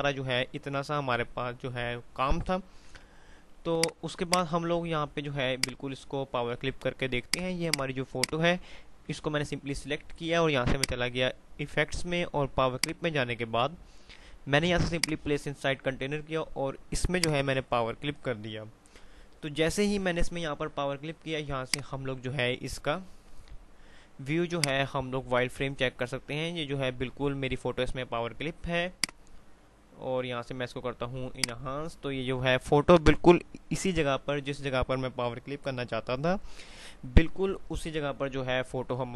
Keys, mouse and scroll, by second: 4.0 click, 4.8 F3, 5.8 click, 6.0 F2, 7.4 click, 10.8 click, 21.8 click, 24.8 click, 29.0 click.